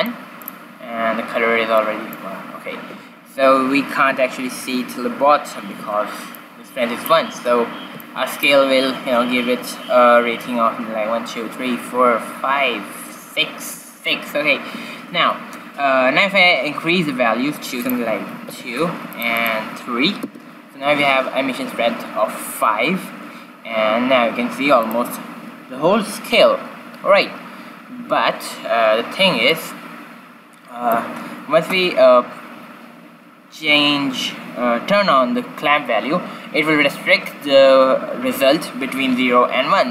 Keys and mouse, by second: 4.5-5.5 middle drag, 5.5 ctrl+b, 17.8-21.4 drag, 24.8-26.5 drag, 27.6-31.2 middle drag.